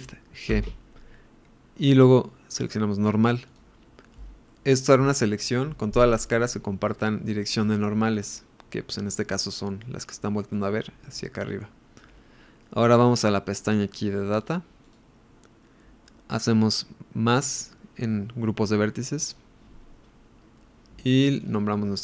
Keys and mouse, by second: 0.5 shift+g, 4.5-9.8 middle drag, 10.2 middle click, 11.6-12.6 middle drag, 14.4 click, 19.2 click, 21.3 click, 21.4-22.0 drag.